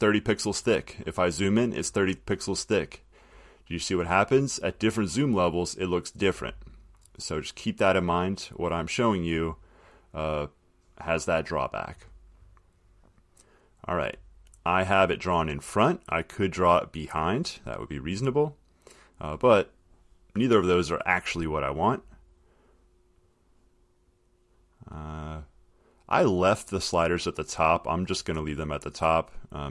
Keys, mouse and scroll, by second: 0.0 middle click, 3.5 click, 3.9 middle click, 4.0 middle click, 5.4 click, 5.7 middle click, 5.7 middle click, 7.2 middle click, 8.6 click, 13.3 click, 17.7 click, 24.3 click, 26.3 click.